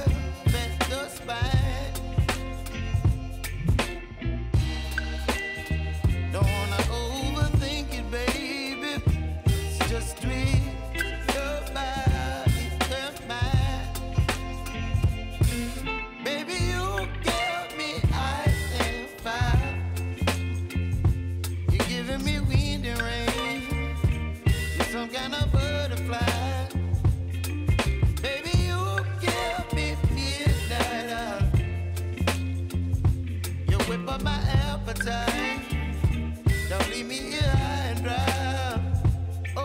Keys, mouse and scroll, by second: 4.1 space, 6.0 space, 8.1 click, 9.8 ctrl+d, 10.4 u, 11.6-13.9 drag, 14.7 u, 15.8 click, 18.9 space, 20.9 space, 23.7-25.5 drag, 26.6 p, 27.2 click, 28.1 u, 31.1-33.1 drag, 33.5 u, 34.5-37.2 drag, 37.2 u, 38.1 click, 38.8-39.4 typing.